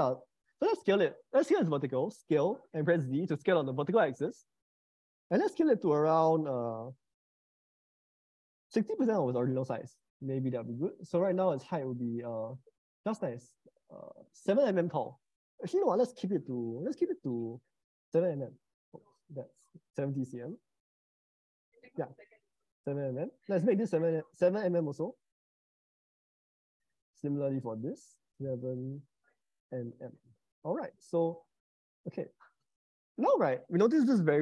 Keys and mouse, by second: 0.2 middle click, 2.2 s, 4.0 z, 6.2-8.9 drag, 13.2-18.3 drag, 19.2-21.8 drag, 21.4 0, 24.2-25.9 drag, 25.5 0, 27.6-29.8 drag, 29.0 0, 32.2-34.4 middle drag.